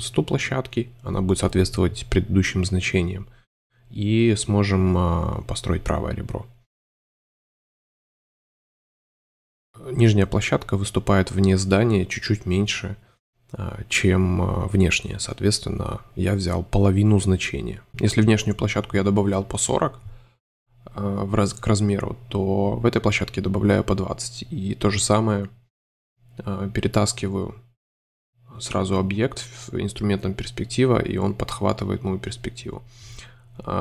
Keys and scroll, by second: 4.3 m, 4.7 2, 7.1 space, 8.0 super+y, 8.4 super+space, 10.2 shift+Tab, 12.2 space, 13.2 super+y, 13.5 super+space, 15.0 shift+Tab, 16.1-18.0 typing, 17.7 Home, 21.0 |, 22.8 super+space, 23.5 shift+space, 23.6 shift+Tab, 26.5 3, 28.2 shift+v, 30.6 m.